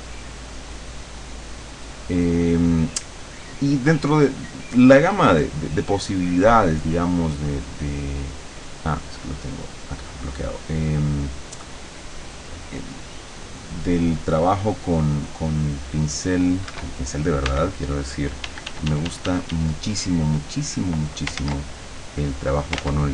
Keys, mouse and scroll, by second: 0.3 click, 2.2 click, 9.3 click, 15.1 right click, 16.7 Escape, 17.5 e, 18.5 d, 20.1 click, 21.5 ctrl+z, 22.2 click, 22.9 ctrl+z.